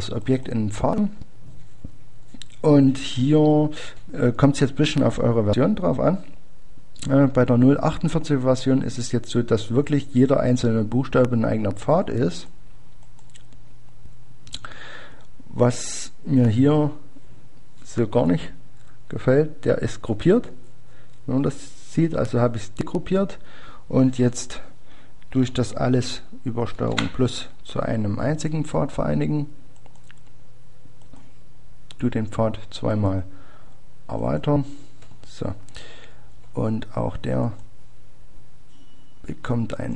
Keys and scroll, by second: 0.9-1.6 typing.